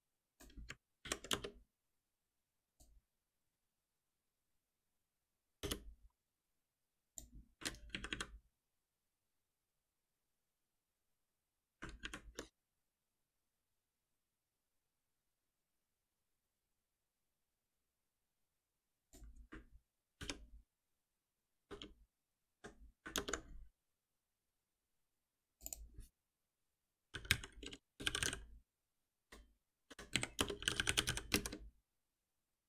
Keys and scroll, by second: 1.0 alt+Delete, 4.4 F6, 8.0 ctrl+shift+Up, 20.2 ctrl+F6.